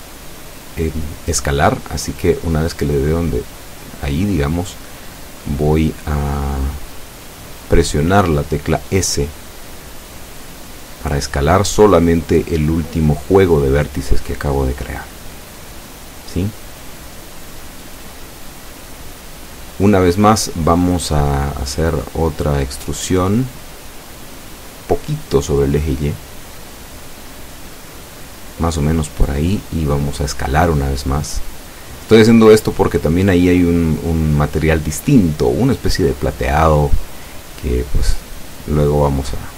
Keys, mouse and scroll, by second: 4.3 click, 6.0 e, 6.3 y, 11.1 click, 16.7 s, 20.1 click, 26.1-27.2 shift+middle drag, 30.7 e, 31.3 y, 36.8 click, 37.7 s.